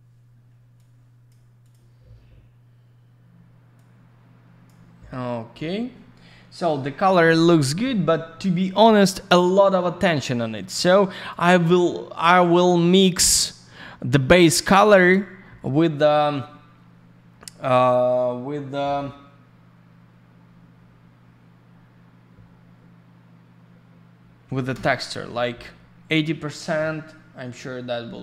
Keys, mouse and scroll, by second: 0.7 click, 1.6 click, 1.7 click, 3.7 click, 10.5 middle click, 10.7 middle click, 11.2 click, 11.3 click, 11.3 click, 11.5 click, 14.8 click, 14.9 click, 14.9 click, 15.1 click, 24.7 Return.